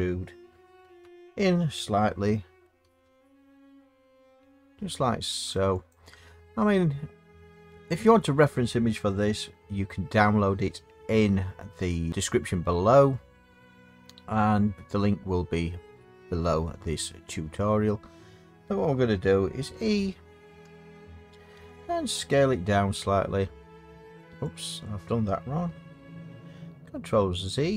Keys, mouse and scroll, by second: 0.8 e, 2.9 s, 5.9 click, 7.4 middle click, 7.4 middle click, 7.9 middle click, 20.6 e, 24.6 click, 27.6 ctrl+z.